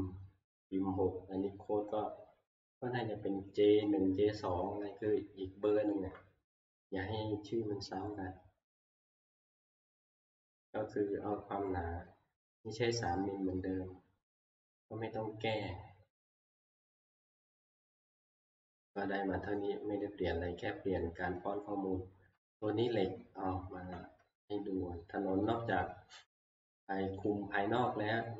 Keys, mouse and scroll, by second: 6.0 Escape, 8.1 click, 10.4 click, 11.3 scroll, 13.1 click, 13.9-14.4 scroll, 14.6-16.3 scroll down 26, 16.3-17.8 scroll up 16, 17.8 scroll, 18.4 scroll up 1, 18.5 middle click, 19.3-20.2 scroll up 3, 20.2 scroll up 2, 21.2 scroll, 21.7 scroll, 23.0 middle click, 23.1-24.8 shift+middle click, 23.4-23.8 scroll, 25.5 middle click, 26.0-26.6 scroll, 27.3 click.